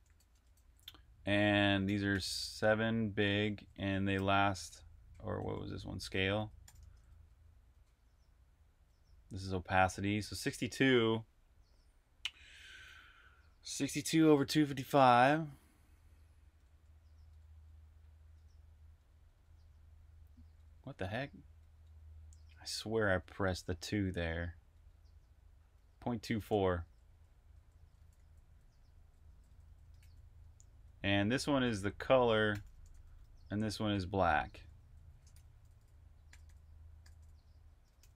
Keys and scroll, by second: 0.0-7.2 typing, 8.2-9.0 typing, 10.2 h, 26.7 Escape, 27.1-29.8 typing, 31.2 typing, 34.0-38.1 typing.